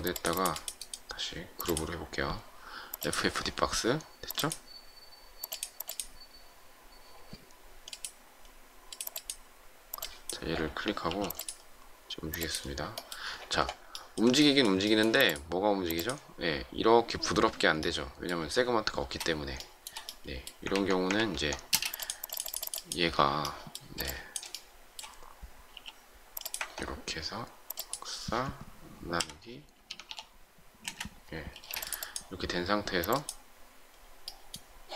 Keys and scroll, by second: 11.0 m, 18.9 space, 20.9 ctrl+z, 21.0 ctrl+z, 22.6 space, 25.6 shift+m, 30.4-31.4 typing.